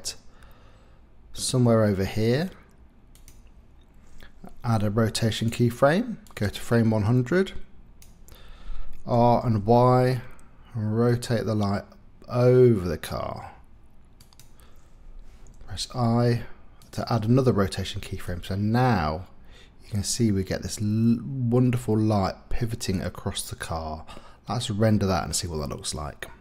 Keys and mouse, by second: 4.6 i, 6.2-8.0 drag, 9.1 r, 9.4 y, 15.6 i, 18.2-21.2 drag, 21.2-26.4 middle drag.